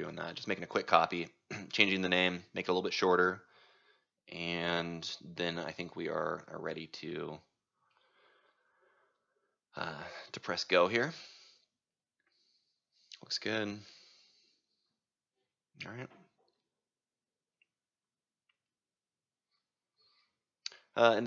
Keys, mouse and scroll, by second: 7.9-10.9 drag, 10.9-16.3 right drag, 16.3-21.2 drag.